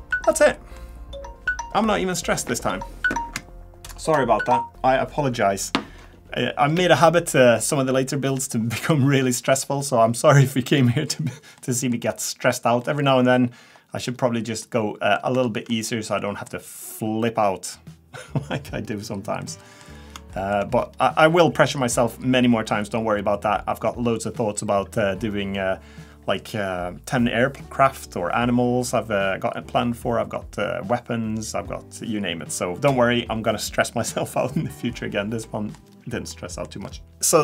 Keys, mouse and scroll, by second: 0.1 shift+middle click, 0.5 middle click, 11.6 middle click, 12.0-12.3 scroll up 4, 12.8 middle click, 14.1-14.5 scroll down 2, 14.6 middle click, 15.4 shift+middle click, 16.2 middle click, 16.8-17.3 scroll down 2, 18.8-19.4 scroll up 3, 19.4 middle click, 20.3 shift+middle click, 20.8-21.3 scroll down 3, 35.4 middle click, 35.8-36.3 scroll down 2, 36.3 middle click, 36.8-37.1 scroll up 1, 37.1 shift+middle click, 37.1 scroll down 2.